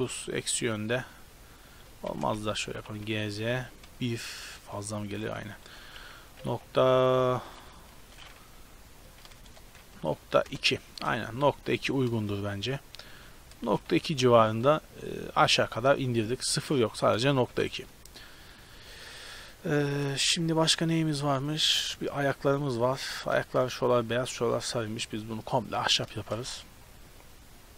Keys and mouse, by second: 3.0 g, 10.9 KP_0, 11.7 z, 13.0 shift+space, 13.7 shift+space, 13.9 z, 14.6-16.8 middle drag, 17.5 Tab, 20.0 shift+space, 26.1 shift+space.